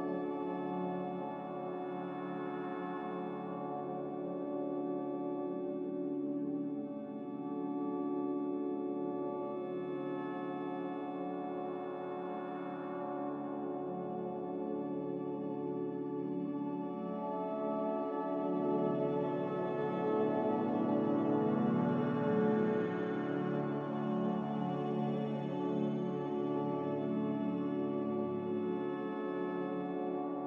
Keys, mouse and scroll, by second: 23.2 x.